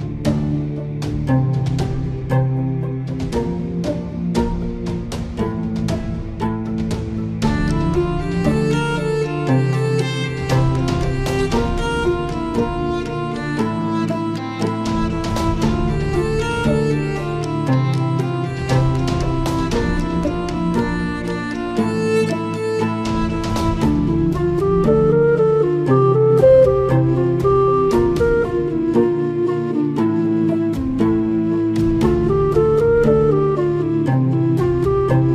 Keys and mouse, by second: 4.2-5.3 drag, 5.7-7.5 middle drag, 9.8 Tab, 12.3 click, 13.4-17.2 drag, 18.2 click, 19.7-21.3 drag, 22.8 click.